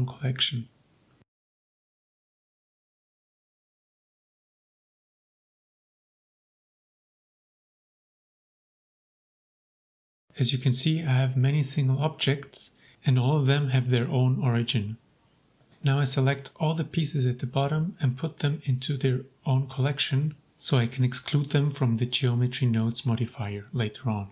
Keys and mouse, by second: 1.6-2.6 drag, 3.6 click, 4.4 m, 8.5 click, 9.8 shift+click, 10.0 shift+click, 11.5-13.3 drag, 13.4-13.7 middle drag, 14.5 middle drag, 15.1-15.4 shift+drag, 16.3-18.2 shift+drag, 18.3-20.9 middle drag, 21.3-22.6 middle drag, 23.2 m.